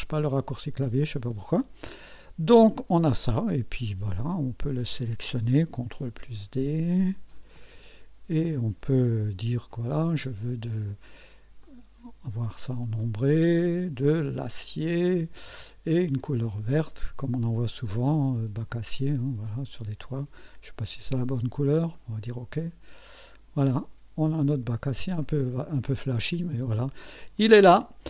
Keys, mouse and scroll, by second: 0.5 right click, 1.9 scroll up 1, 5.1 click, 6.0 ctrl+d, 7.1 click, 7.6 ctrl+d, 9.7 click, 11.7 click, 13.0 click, 14.5 click, 16.0 click, 18.7 click, 22.0 click, 23.2 click, 23.7-25.2 drag, 25.3 click, 25.9-27.4 drag, 27.9-28.0 drag.